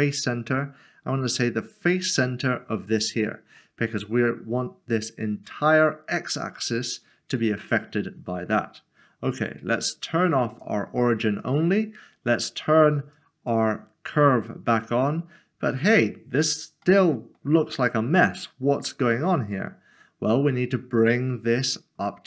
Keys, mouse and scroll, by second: 2.9 click, 3.7 middle click, 10.5 middle click, 10.7 click, 14.8 click, 15.0 middle click, 16.0 scroll down 1, 16.8 middle click.